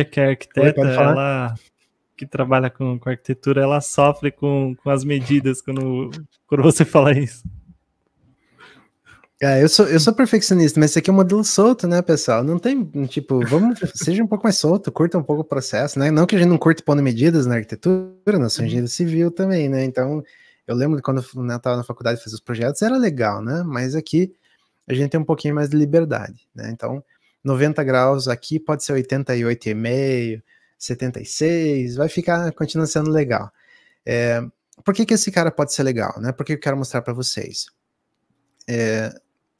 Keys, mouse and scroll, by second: 38.3-38.8 scroll down 2.